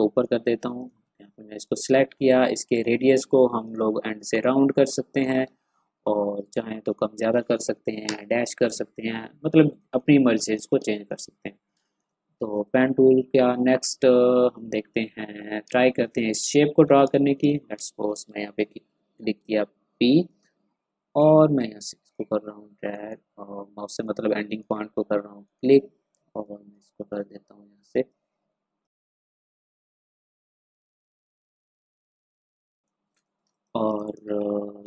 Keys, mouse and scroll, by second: 5.5-5.8 ctrl+scroll up 1, 6.8 click, 7.7 3, 8.0 Return, 9.5 click, 10.2 ctrl+scroll down 1, 10.8 space, 10.9 click, 11.2 ctrl+scroll down 1, 11.7 ctrl+space, 11.8 click, 14.8 v, 15.3 click, 15.6 space, 15.8 click, 16.3-16.8 ctrl+scroll up 1, 17.0 ctrl+space, 17.4 click, 17.5 ctrl+scroll up 1, 17.7 ctrl+space, 18.5 p, 19.3-19.7 scroll up 2, 20.2-28.9 drag, 28.9 v, 28.9 click, 29.0 space, 29.1 click, 29.4 ctrl+z, 29.6 click, 29.6 space, 29.8 click, 29.8 space, 30.0 click, 30.9-33.4 typing, 31.0 click, 31.3 ctrl+z, 31.6 click, 32.0 click, 32.3 click, 33.1 click, 33.5 click, 34.3 ctrl+scroll down 1.